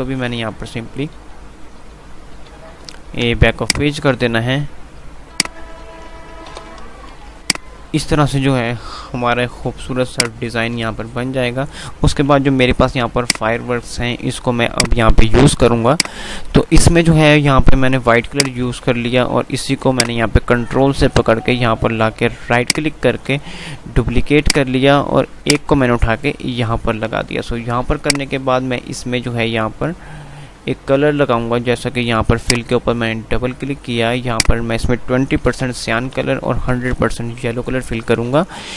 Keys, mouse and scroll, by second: 3.7 click, 6.8 shift+Page_Up, 7.4 click, 7.8 F3, 10.4-12.9 drag, 12.9 F2, 13.2 click, 13.4 F2, 14.8-22.8 drag, 22.8 ctrl+right click, 23.7 F3, 24.3-27.9 drag, 27.9 F2, 29.5 F3, 30.3 F2, 30.9 click, 35.9 Tab.